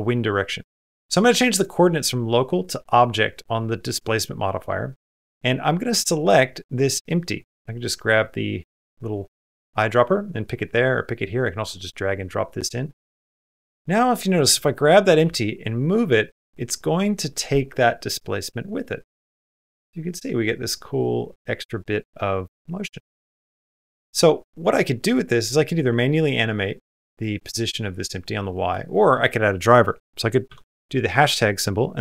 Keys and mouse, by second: 1.4-2.5 drag, 14.4 click, 15.0 g, 27.0-28.5 drag, 28.8-32.0 drag.